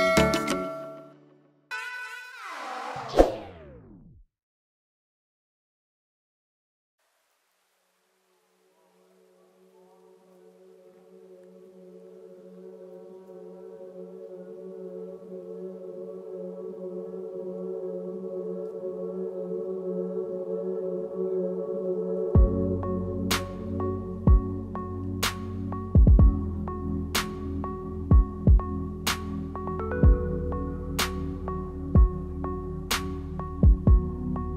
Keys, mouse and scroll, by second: 2.2 click, 3.8 scroll up 4, 4.4 shift+middle click, 4.7 middle click, 6.3 click, 6.6 middle click, 8.8 ctrl+s, 9.1 middle click, 9.5 right click, 10.1 click, 10.4 Tab, 10.8-11.6 scroll down 4, 11.0 middle click, 12.8 Tab, 13.2 Tab, 13.3 ctrl+z, 13.4 ctrl+z, 13.6 ctrl+z, 13.8 ctrl+z, 14.0 ctrl+z, 14.3 ctrl+z, 14.9 ctrl+s, 15.3 click, 15.5-16.0 scroll up 6, 15.5 middle click, 16.0 shift+middle click, 17.0 middle click, 18.3 click, 18.7 Tab, 18.8 click, 18.8 shift+middle click, 19.3 click, 20.1 click, 20.7 click, 22.9 click, 24.1 middle click, 24.9 click, 25.4 click, 26.0 click, 26.2 click, 26.5 shift+click, 26.6 shift+click, 26.8 click, 26.9 shift+click, 27.1 shift+click, 27.1 middle click, 27.7 shift+click, 27.9 shift+click, 28.2 shift+click, 28.5 shift+click, 28.9 shift+click, 29.3 shift+click, 29.7 shift+click, 30.0 shift+click, 30.6 click, 31.1 middle click, 32.1 click, 32.9 e, 34.3 s.